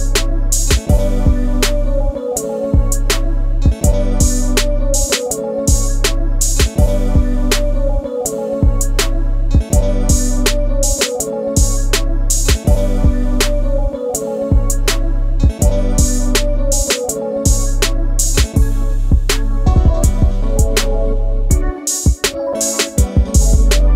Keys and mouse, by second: 1.7-3.0 drag, 3.4 click, 4.5 e, 6.2 click, 6.7 e, 7.4 click, 8.2 e, 9.9 click, 12.5 click, 14.8-15.8 drag, 16.3 click, 16.7-18.2 drag, 18.9 click, 20.3 click, 21.4 click, 22.1-23.8 drag.